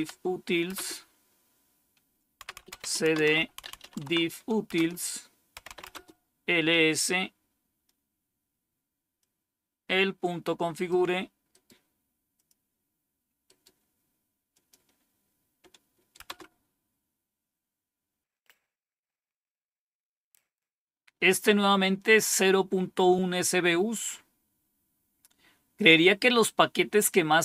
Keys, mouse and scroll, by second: 0.0-0.1 typing, 0.6 Return, 2.1-6.1 typing, 9.1-10.8 drag, 11.4 right click, 12.2 click, 13.3 right click, 14.4 click, 16.1 Return, 20.3-27.4 scroll down 1.